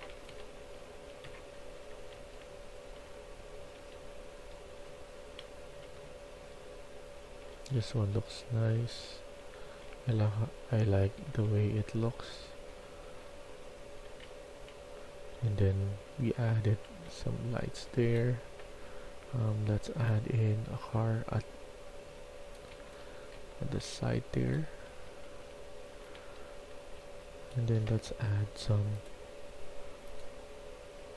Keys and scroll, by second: 0.0-3.6 typing, 4.8-11.2 typing, 12.7-17.3 typing, 22.6-23.7 typing, 24.9 Escape, 25.3 Escape, 26.1-29.9 typing.